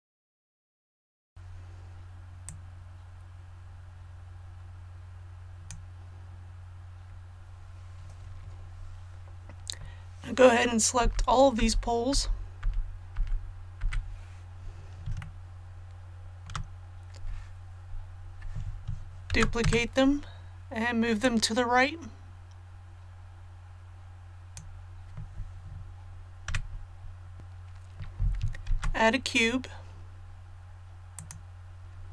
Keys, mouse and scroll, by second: 0.0-1.3 typing, 0.0 click, 0.4 click, 0.9 click, 2.4-6.5 drag, 11.0-13.8 typing, 15.2 shift+middle click, 19.3 shift+d, 21.2-25.5 drag, 26.5 a, 28.6 shift+a, 31.1 click.